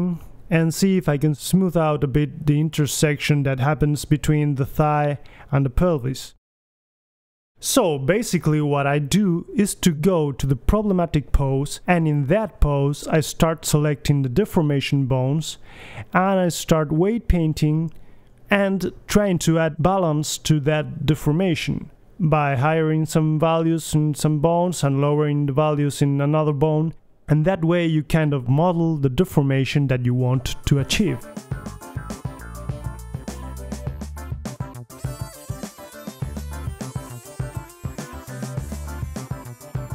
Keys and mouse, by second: 0.7-1.4 middle drag, 0.9 g, 1.5 click, 1.7 right click, 2.2 click, 2.5-3.4 drag, 3.7-4.4 middle drag, 4.8-5.7 middle drag, 4.8 g, 6.1 middle click, 7.6 click, 8.4-9.6 drag, 9.6-11.4 middle drag, 11.4-12.8 drag, 12.8 middle click, 13.1-13.8 drag, 13.8 middle click, 14.1 KP_3, 14.7 click, 15.2 middle click, 15.4 click, 15.4-18.4 typing, 16.4-16.8 middle drag, 17.1 right click, 17.4 right click, 17.8 middle click, 18.1 right click, 18.8 middle click, 19.1-19.6 drag, 19.6 middle click, 19.9 click, 20.1 g, 20.1 middle click, 20.4 drag, 20.6-21.0 middle drag, 20.7 click, 21.0 click, 21.2-21.5 drag, 21.5 KP_3, 21.6 middle click, 22.0 click, 22.3-22.6 drag, 22.3 right click, 22.4 g, 23.2 right click, 23.6 alt+g, 23.6 click, 23.8 middle drag, 24.4 right click, 24.7 click, 24.9 middle click, 25.0-25.8 right drag, 25.1-25.4 drag, 25.6 KP_3, 25.8 middle drag, 25.8 g, 26.8-27.2 drag, 26.9 g, 27.9 click, 27.9 right click, 28.6-29.4 right drag, 29.5 middle click, 30.1 click, 30.1 right drag, 30.2 KP_3, 30.4 middle click, 30.4 g, 30.7 right click, 31.1 click, 31.2 middle drag, 31.4 right click, 31.5 middle click, 31.9 right click, 32.0-32.4 middle drag, 32.4 click, 33.2 right drag, 33.4 KP_3, 33.5 middle click, 33.8-34.1 drag, 34.1 right drag, 34.1 g, 34.8-35.4 middle drag, 35.2 g, 35.6-36.1 middle drag, 35.8 KP_3, 36.0 g, 36.1 drag, 36.8-37.4 drag, 37.6 click, 37.9 g, 37.9 drag, 39.0 middle click, 39.6 click.